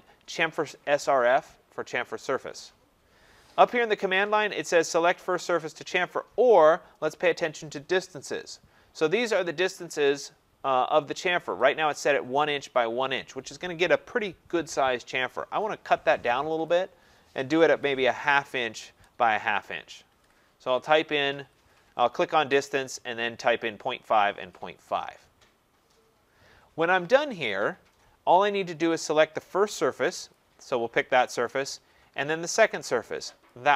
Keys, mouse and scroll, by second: 16.6-21.8 drag, 17.7-18.6 typing, 20.0-21.4 typing, 30.3 click, 33.5 click.